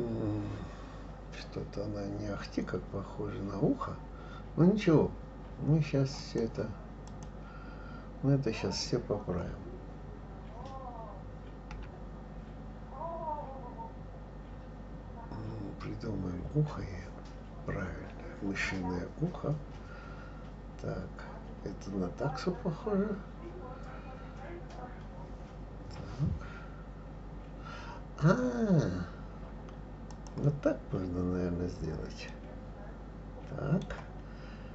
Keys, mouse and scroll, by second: 6.2 click, 7.0 click, 11.7 g, 32.3-34.7 middle drag.